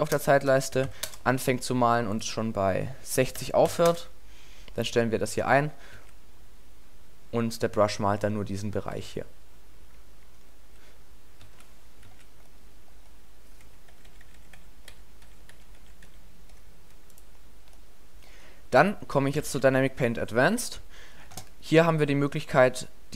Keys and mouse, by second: 0.3 BackSpace, 0.9-2.2 middle drag, 5.3-5.9 middle drag, 5.9 alt+a, 9.0 alt+a, 11.5 alt+a, 12.1 alt+a, 13.9-14.6 ctrl+z, 14.9 ctrl+z, 15.2 ctrl+z, 15.5-16.1 ctrl+z, 17.8 middle drag, 18.2 middle click, 19.4 a, 22.1-22.4 middle drag.